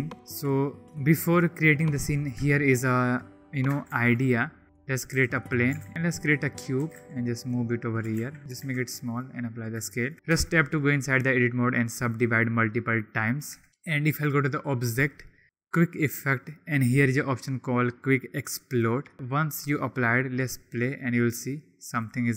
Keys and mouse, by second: 2.5 shift+click, 3.9 shift+a, 5.2 s, 5.6 click, 5.9 ctrl+a, 6.8 g, 6.9 z, 7.4-8.0 drag, 8.1 ctrl+a, 8.4 s, 8.7 ctrl+a, 9.2-9.5 drag, 9.8 shift+drag, 10.6 Tab, 11.1-12.2 drag, 12.5 click, 12.9 click, 13.5 Tab, 14.2-18.8 drag, 21.3-22.1 drag.